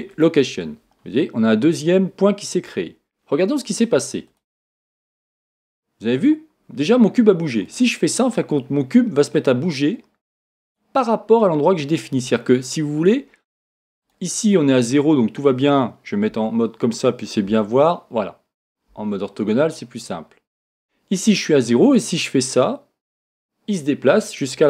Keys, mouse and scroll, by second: 2.7 |, 4.3 click, 7.6-11.4 drag, 14.0 click, 16.3 KP_1, 20.0 scroll down 1, 20.0 KP_5, 21.8-24.6 drag.